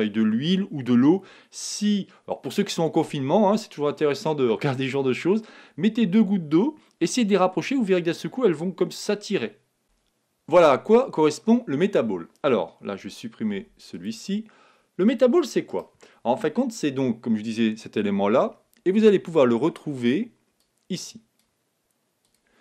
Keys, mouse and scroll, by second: 13.5 x, 15.0-16.8 drag, 15.6-17.4 right drag, 20.5-22.6 drag.